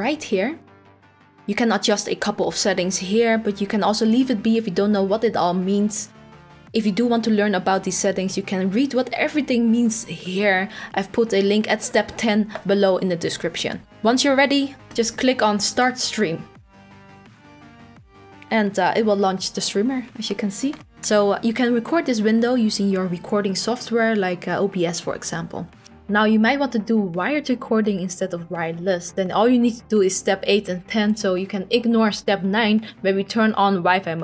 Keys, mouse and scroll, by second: 1.8-2.7 scroll, 2.7-3.8 scroll, 4.2-6.4 scroll, 13.9-14.4 scroll, 14.4-15.8 scroll, 15.8 click.